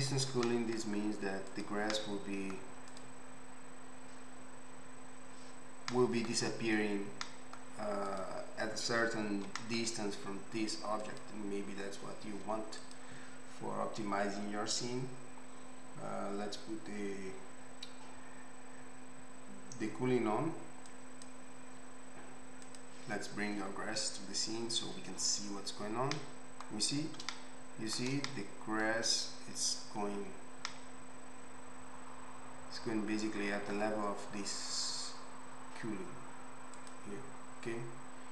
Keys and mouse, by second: 0.3 g, 8.1 click, 8.2-20.9 middle drag, 9.4 g, 20.9-25.4 drag, 25.4-33.7 middle drag, 36.7 click.